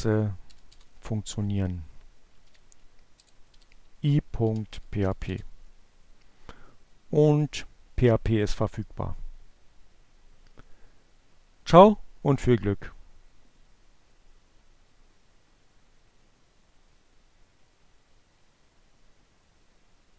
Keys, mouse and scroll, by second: 0.3 click, 0.5 shift+6, 0.8 BackSpace, 2.8-5.0 typing.